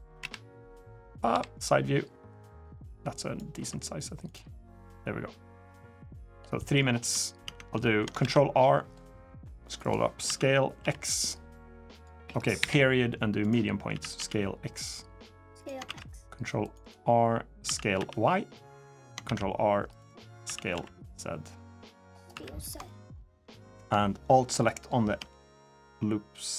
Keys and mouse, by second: 0.0 KP_1, 1.1 KP_3, 2.1-3.1 drag, 3.3 s, 4.6-6.1 drag, 6.3 middle drag, 6.8 Tab, 7.2 Tab, 7.6 shift+middle drag, 8.0 ctrl+r, 10.0 s, 13.7 s, 15.6 ctrl+r, 17.4 s, 19.0 ctrl+r, 20.2 s, 22.1 3, 22.6 alt+click, 23.2 click, 25.5 alt+shift+click, 26.3 alt+shift+click.